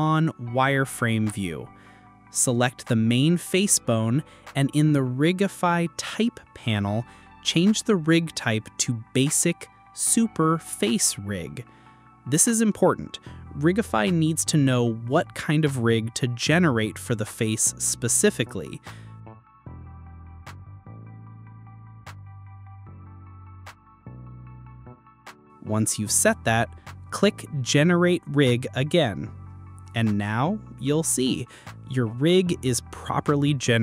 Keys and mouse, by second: 1.2 click, 3.5 click, 6.4 click, 16.9 click, 19.6-22.7 drag, 25.4-26.0 drag, 29.0 click, 31.7 click, 33.5-33.8 drag.